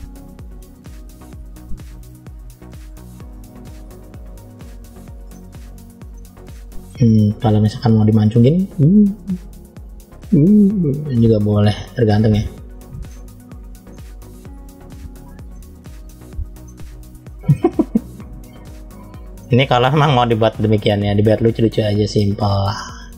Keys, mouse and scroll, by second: 0.8 click, 2.2 click, 3.3 click, 4.4 click, 5.2 middle click, 6.3 middle click, 7.4 click, 8.5 click, 9.6 click, 10.3 click, 11.0 click, 11.7 click, 12.0 click, 12.6 click, 13.0 middle click, 13.8 middle click, 14.8 middle click, 15.9 middle click, 16.7-17.4 scroll down 2, 17.4 middle click, 18.5-19.0 scroll up 3, 19.3 middle click, 21.0 click, 22.2 click, 23.0 click.